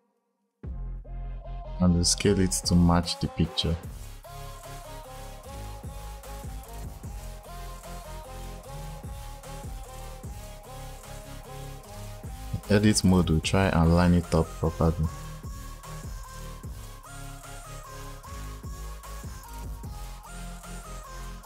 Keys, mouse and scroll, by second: 5.8 g, 6.3 click, 6.7 scroll down 1, 6.8 scroll up 2, 7.1 g, 8.6 Tab, 9.2 click, 10.1 click, 10.6 click, 11.5 click, 13.6 click, 14.4 click, 15.7 click, 16.5 click, 17.2 click, 17.6 click, 17.9 click, 18.4 click, 19.0 click, 19.8 click, 20.0 click, 20.6 click, 21.1 click.